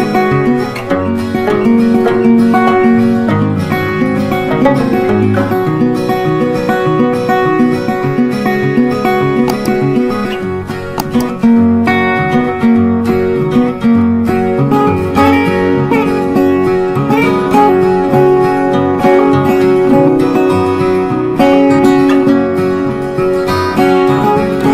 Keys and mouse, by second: 0.6-3.8 drag, 3.8-6.7 drag, 6.7-10.7 drag, 11.2 click, 15.1-19.0 drag, 19.0 ctrl+b, 20.3-23.1 drag, 23.1 right click.